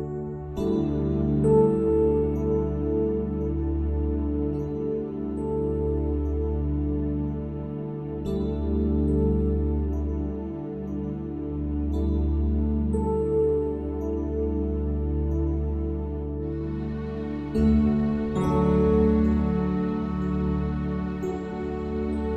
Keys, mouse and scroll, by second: 0.8 click, 1.6 click, 2.5 click, 3.8 click, 4.7-6.4 drag, 7.3 click, 7.9 s, 9.1 middle click, 10.4 click, 12.2 middle click, 13.2 alt+s, 13.8 click, 14.1 middle click, 14.4 click, 14.8 alt+s, 16.2-17.4 drag, 17.4 a, 17.6 a, 17.8 w, 18.5 click, 18.8 middle click, 19.1 click, 19.6 e, 20.9 middle click, 22.0 alt+s.